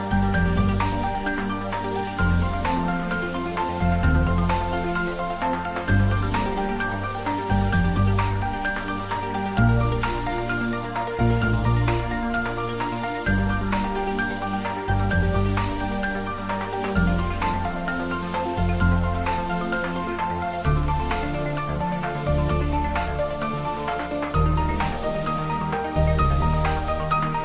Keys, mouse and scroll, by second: 1.2 click, 1.5 Tab, 1.9 middle click, 3.0 Tab, 3.4 click, 4.4 4, 5.3 click, 11.5 click, 11.8 ctrl+middle click, 12.1 shift+middle click, 12.7 e, 15.6 click, 17.4 click, 18.6 s, 19.7 click, 19.8 e, 20.3 click, 20.5 ctrl+z, 21.0 click, 22.7 e, 23.8 click, 23.9 Tab, 24.2 shift+z, 25.3 Tab, 25.8 g, 26.7 click, 26.9 s, 27.2 click.